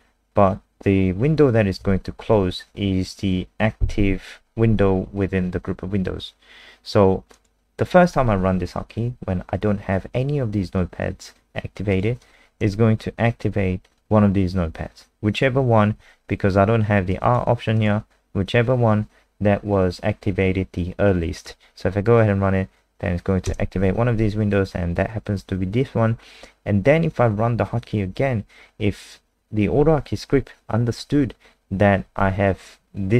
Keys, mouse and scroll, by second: 23.5 KP_0.